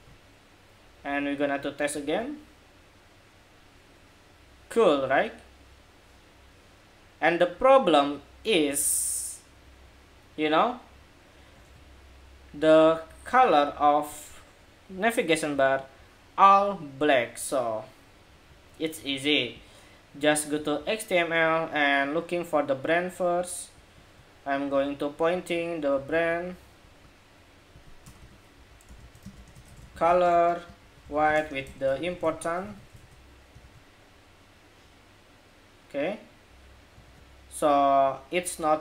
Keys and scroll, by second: 1.8 super+r, 11.4 super+Tab, 25.6 super+c, 25.8 super+c, 28.7 super+v, 32.4 super+s, 33.3 super+r, 36.7 super+Tab.